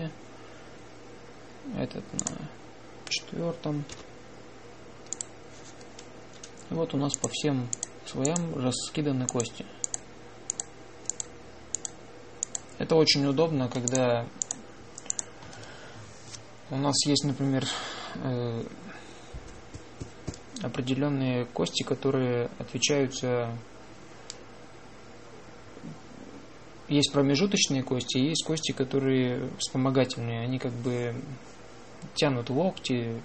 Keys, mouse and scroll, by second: 3.0-4.7 drag, 4.8 m, 8.3 click, 8.3-17.9 drag.